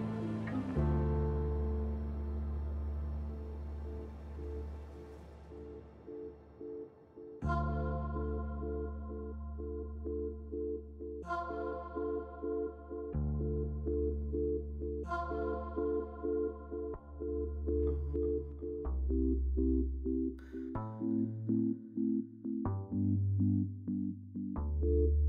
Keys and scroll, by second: 2.6 alt+x, 4.8-7.4 typing, 9.6 f, 11.0 a, 12.2 ctrl+z, 12.6 b, 14.0 F3, 14.8 q, 15.8 q, 17.0 ctrl+c, 17.1 ctrl+v, 18.5 t, 20.6 f, 23.2 s.